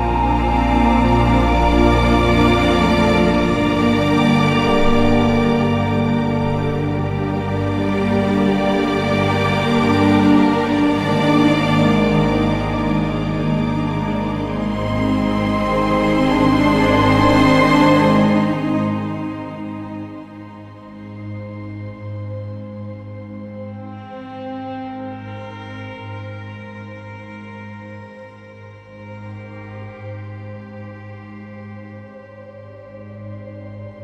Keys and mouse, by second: 1.8 ctrl+KP_Add, 2.3-2.9 ctrl+KP_Add, 3.8 ctrl+KP_Add, 3.9 ctrl+KP_Add, 4.1 ctrl+KP_Add, 4.2 ctrl+KP_Add, 4.3 ctrl+KP_Add, 5.1 g, 5.3 y, 6.3 Escape, 7.0 o, 7.6 g, 7.8 y, 12.7 click, 13.5 Tab, 19.6 middle drag, 23.9 z, 24.9 middle click, 33.7 middle click.